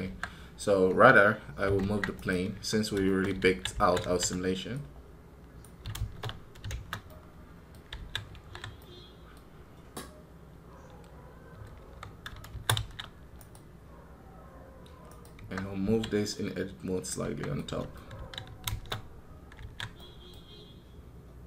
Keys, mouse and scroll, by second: 2.0 right click, 11.5 scroll down 2, 11.6 KP_3, 13.2 right click, 14.9 right click.